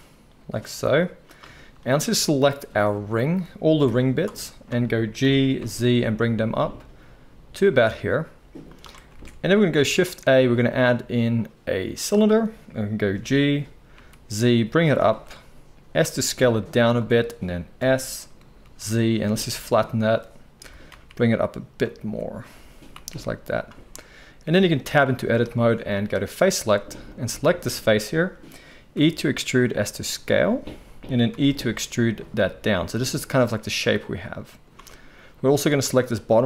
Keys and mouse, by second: 2.2-8.7 drag, 2.2-4.6 middle drag, 3.8 g, 5.2 g, 8.7-9.1 middle drag, 9.1 alt+a, 9.8 shift+a, 13.1 g, 15.8 s, 17.7-26.3 middle drag, 17.7 s, 20.6 g, 22.0 s, 22.6 s, 24.7 Tab, 26.3 click, 28.9 e, 31.3 e, 32.3 z, 35.4 middle click, 35.4 z, 36.2 click, 36.2-36.4 middle drag.